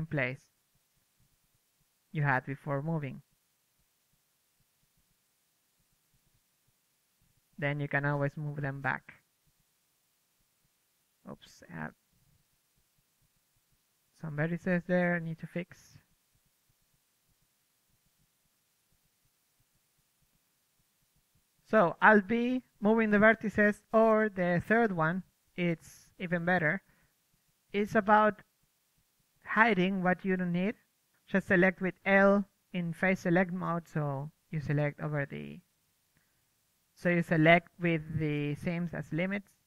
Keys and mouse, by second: 0.8-2.5 middle drag, 2.5 click, 3.4 middle click, 3.7-6.7 drag, 6.3 m, 6.7 KP_3, 8.0 Tab, 8.1 KP_3, 8.3 z, 9.0 alt+b, 9.6 ctrl+Tab, 10.3-14.8 typing, 11.9 right click, 12.3 click, 13.6 click, 13.7 Tab, 14.0 Tab, 15.5 Tab, 15.6 drag, 16.0 drag, 17.0 Tab, 17.0-22.9 typing, 19.1 click, 23.7 Tab, 23.7 click, 24.7-25.7 typing, 25.3 Tab, 26.2-27.6 middle drag, 28.9 ctrl+z, 29.4 f, 30.1 ctrl+z, 30.5-31.8 typing, 30.9 Tab, 31.2 Tab, 31.7-33.2 drag, 32.0 Tab, 32.8 Tab, 33.0 Tab, 33.2 Tab, 34.0 l, 34.8 Tab, 35.2 m, 36.0 click, 38.3 KP_3, 38.7 Tab.